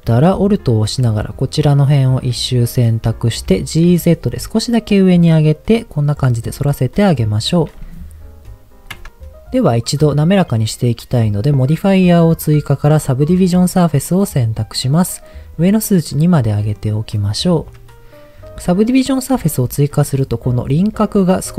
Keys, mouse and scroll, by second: 0.5 alt+click, 2.8 middle click, 3.4 g, 3.9 z, 5.7 click, 6.6 middle click, 9.1 click, 16.0 click, 17.0 middle click, 19.4 Tab, 19.7 middle click.